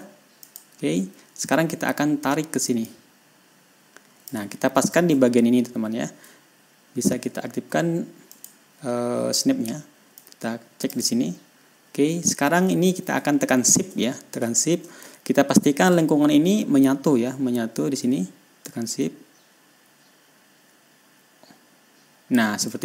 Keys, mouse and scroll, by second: 0.9 click, 3.3-4.9 drag, 5.0-5.4 ctrl+scroll up 2, 8.8 click, 10.6 click, 11.9-12.3 ctrl+scroll down 4, 12.7 ctrl+scroll up 2, 15.6 ctrl+shift+scroll up 2, 16.0 ctrl+scroll down 2, 19.1-22.8 shift+drag.